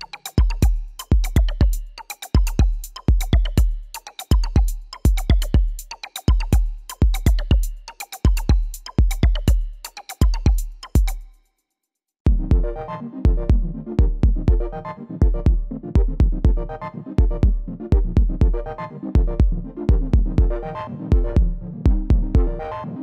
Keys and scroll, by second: 12.7-13.4 typing, 15.5 typing, 16.3 ctrl+a.